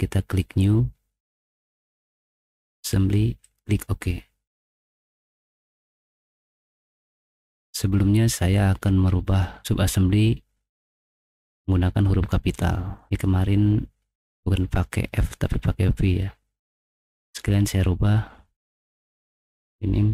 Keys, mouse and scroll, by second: 1.2 click, 3.4 click, 3.9 middle click, 5.3 click, 7.0 middle click, 9.6-12.6 middle drag, 13.0 middle click, 17.2 right click, 19.0 click.